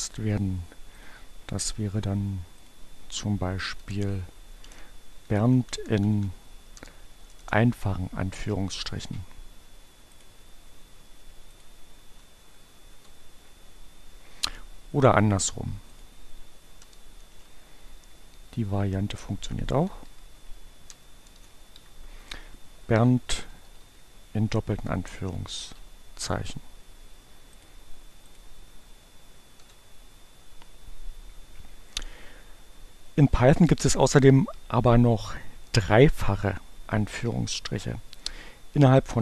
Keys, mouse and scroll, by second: 0.9 click, 2.3 click, 3.2 BackSpace, 4.9 Right, 6.9 BackSpace, 10.0 click, 11.3 click, 12.3 Up, 12.6 Return, 15.6 click, 16.5 BackSpace, 17.7 Right, 21.1 shift+BackSpace, 22.3 shift+Left, 22.7 shift+Delete, 23.6 shift+2, 23.7 shift+Right, 24.5 Right, 24.8 Delete, 25.0 shift+2, 27.6 click, 28.7 Up, 29.4 Return.